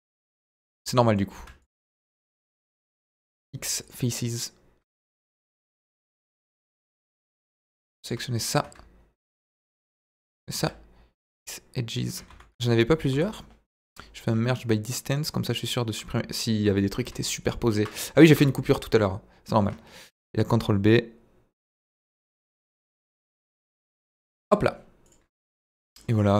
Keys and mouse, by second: 2.1 middle click, 3.2 x, 5.2 middle click, 6.1 middle click, 7.3 middle click, 8.3 middle click, 10.0 middle click, 10.5 x, 12.3 ctrl+z, 13.1 a, 13.8 m, 16.7 middle click, 18.4 f, 19.0 middle click, 20.1 ctrl+b, 22.2 click, 22.7 Tab, 23.0 middle drag, 24.2 KP_Divide, 25.1 click, 25.3 middle drag, 25.9 middle click.